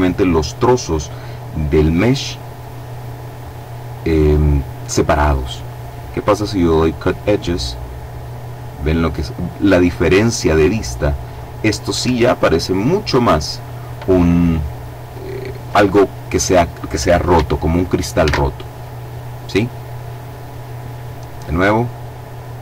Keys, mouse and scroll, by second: 7.1 click, 9.7-10.8 scroll down 2, 11.0-11.5 scroll up 2, 11.5 Escape, 11.5 scroll up 1, 12.9 click, 17.6 alt+a, 21.2 click.